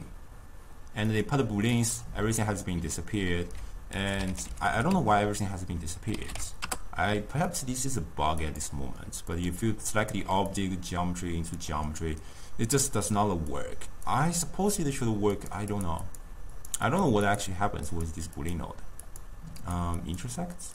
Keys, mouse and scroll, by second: 1.7-3.4 middle drag, 3.4 ctrl+a, 8.5 click, 10.6-13.7 drag, 15.4 click, 15.8 click, 16.1 click, 16.6 click, 17.0 click, 18.0 click, 18.4-20.7 drag.